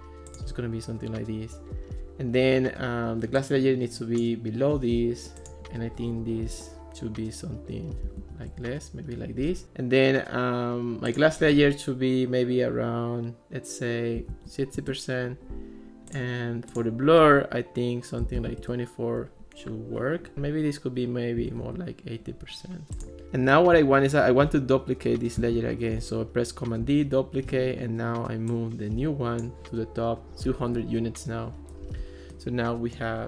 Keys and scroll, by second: 7.8-8.7 typing, 14.0-14.8 typing, 18.0-18.9 typing, 21.4 8, 21.7 Return, 25.4 super+d, 30.4 0, 30.7 Return.